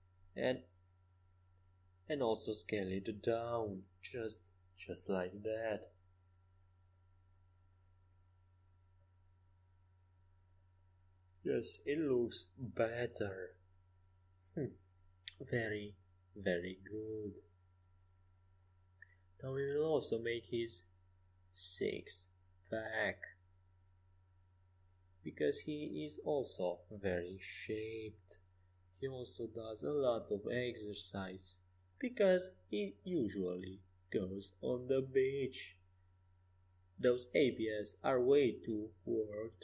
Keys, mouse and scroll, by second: 2.5 e, 3.3 s, 4.6 middle click, 7.4-9.4 drag, 9.0-10.9 middle drag, 18.5 right click, 19.1-20.4 middle drag, 21.9-24.5 right drag, 24.5-26.4 middle drag, 25.0 e, 26.4 s, 29.2-31.8 middle drag, 30.5-34.4 right drag, 31.8 e, 32.6 s, 34.8 middle click, 37.4-39.5 drag, 39.5-39.6 right drag.